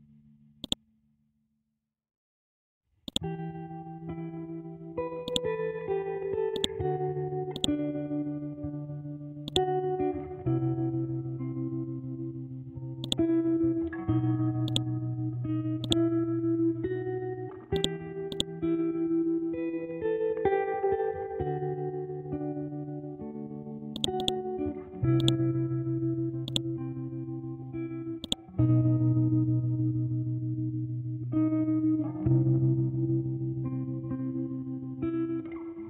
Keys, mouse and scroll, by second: 1.8-3.0 scroll up 1, 3.0 click, 5.2-13.0 drag, 13.0 right click, 14.7 click, 18.3 right click, 19.5 F12, 20.2 Tab, 21.8 F12, 22.0 Tab, 23.9 click, 24.2 right click, 25.2 click, 27.0-28.2 scroll up 1, 28.2 click, 29.0 ctrl+z, 29.6 F12, 30.1 Tab, 31.8-32.2 scroll down 1, 33.0-33.9 scroll up 1, 33.9 F12, 34.2 Tab.